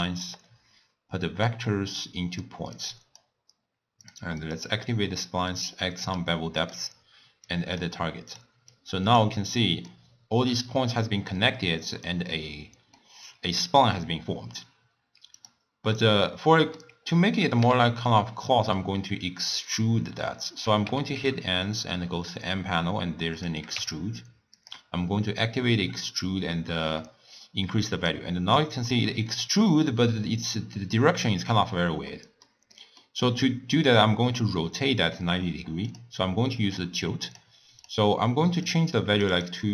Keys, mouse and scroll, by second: 1.5 drag, 2.8 click, 4.3 click, 4.6 click, 5.3-6.9 drag, 7.5 click, 8.8 click, 10.0-15.4 middle drag, 15.4 click, 16.0-17.7 middle drag, 17.7 n, 21.0 n, 21.3 n, 23.4 click, 23.8 n, 24.8 click, 25.5-28.5 drag, 29.0-31.1 middle drag, 31.1 scroll up 1, 31.3-32.2 scroll down 1, 32.2-33.3 middle drag, 33.3-36.0 scroll up 4, 36.0-37.4 drag, 38.7-39.7 drag.